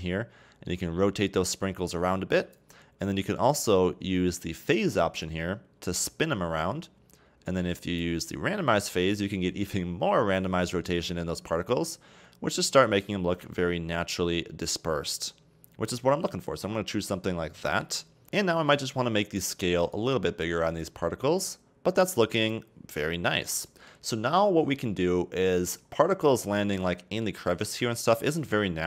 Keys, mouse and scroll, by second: 5.2-8.2 drag, 8.9-12.0 drag, 18.2 click, 19.1-19.9 scroll down 2, 19.9-22.8 drag, 22.8-23.6 scroll down 5, 23.6-25.4 scroll up 2, 25.4-25.9 middle drag, 25.9-26.6 scroll up 4, 26.6-28.8 middle drag.